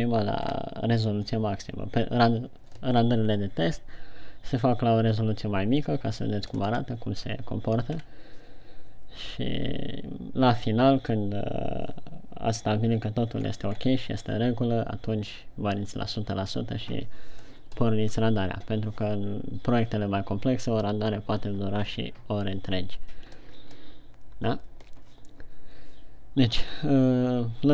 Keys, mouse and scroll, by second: 1.0-1.3 scroll up 2, 8.4-8.9 scroll up 2, 13.7-15.7 scroll down 3.